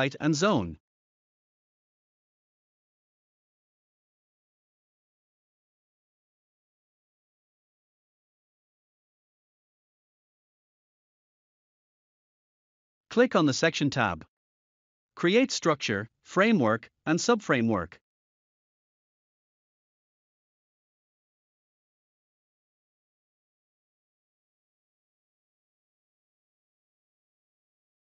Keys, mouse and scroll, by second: 0.0 click, 1.9 click, 4.5 click, 5.9-7.3 typing, 8.4 1, 10.0 click, 11.6 click, 13.2 click, 14.2 z, 15.5-17.2 typing, 19.2 click, 23.8 click, 27.1 click.